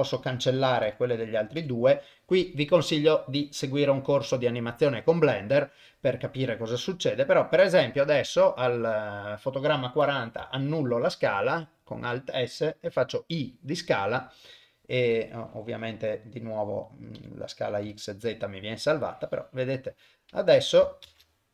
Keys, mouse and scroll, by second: 0.9 Delete, 1.4 click, 1.6 Delete, 6.7 click, 11.2 alt+s, 12.9 i, 15.5 click, 17.2 Delete, 17.7 click, 17.9 Delete, 18.9-20.8 drag, 21.0 shift+space.